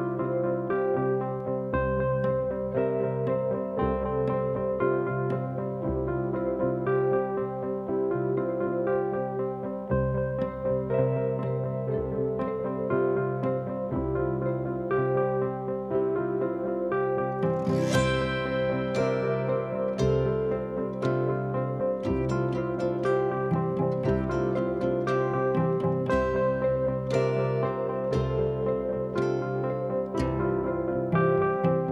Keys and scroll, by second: 0.2 F1, 1.6 F2, 5.0 F1, 7.5 ctrl+d, 17.1 F1, 17.2 F2, 22.8 ctrl+d, 22.9 Escape, 24.2 F1, 29.4 p, 31.6 p.